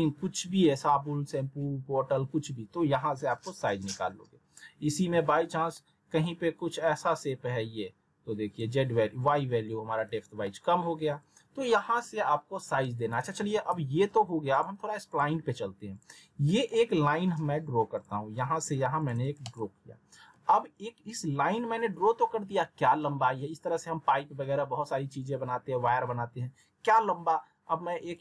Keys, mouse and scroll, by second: 5.1 r, 5.7-6.3 alt+middle drag, 7.2-8.8 drag, 9.8 w, 10.4-11.4 alt+middle drag, 13.2 alt+w, 13.7 z, 14.5 click, 16.2 click, 16.4 middle click, 18.0 click, 19.0 shift+click, 19.2 right click, 28.1-28.2 drag.